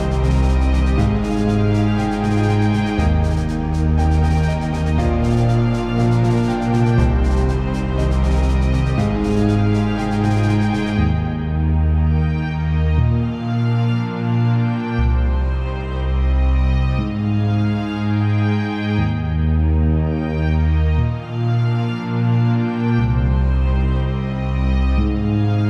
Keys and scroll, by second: 12.5 ctrl+j, 16.6 ctrl+t.